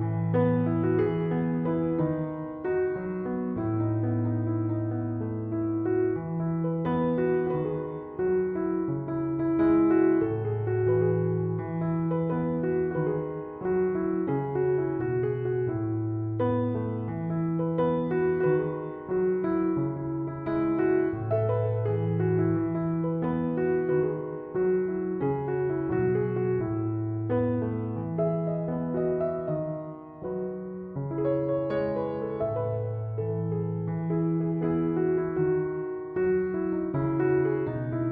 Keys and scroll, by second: 13.1 Return.